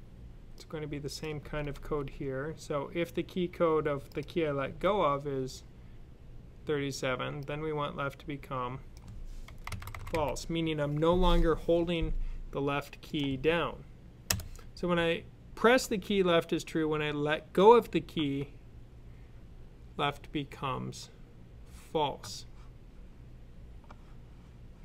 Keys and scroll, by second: 1.6 super+c, 4.5 super+v, 9.3-10.0 typing.